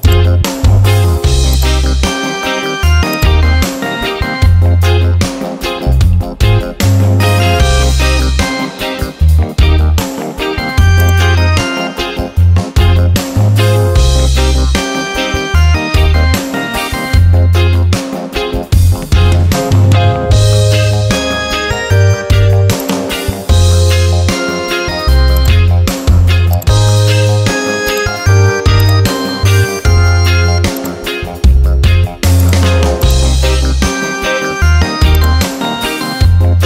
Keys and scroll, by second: 12.9-15.1 typing, 16.4-20.2 typing, 21.1 ctrl+a.